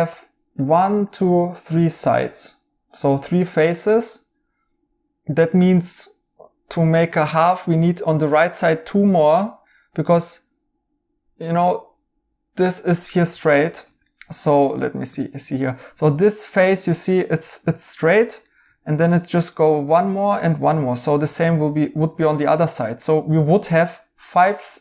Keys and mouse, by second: 13.7 right click, 18.4 right click, 20.6 right click, 22.3 right click.